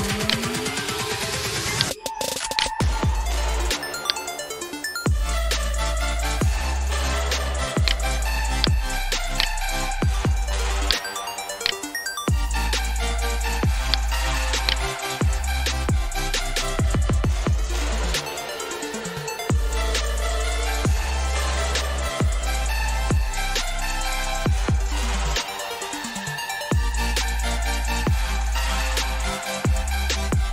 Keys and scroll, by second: 15.4-18.4 typing, 23.8 alt+Tab, 25.8 alt+Tab, 29.1 Left, 30.4 Tab.